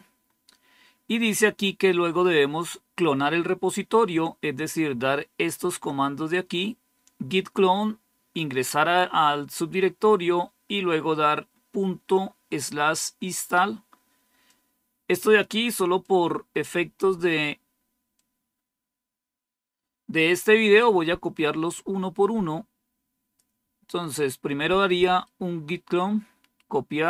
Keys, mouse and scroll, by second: 0.6-1.2 scroll down 1, 14.4 click, 15.9 click, 18.0-23.3 drag, 23.8 click, 25.1-26.4 right drag, 26.5 right click.